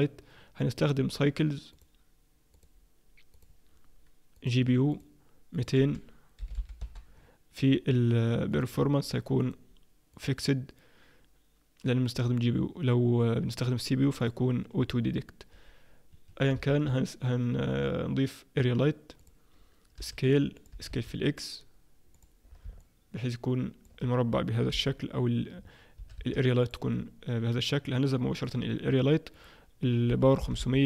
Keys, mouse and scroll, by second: 0.8 click, 1.7 click, 2.6 click, 4.4 click, 5.5 click, 6.6 0, 7.7-8.5 scroll down 2, 8.5 click, 8.5-9.4 scroll down 3, 9.4 click, 9.4-10.8 scroll down 1, 14.2 click, 16.1 Escape, 16.6 shift+a, 20.0 s, 20.7 s, 22.8 middle click, 24.7 KP_1, 26.0 s, 28.4 click, 29.3 click, 30.6 0.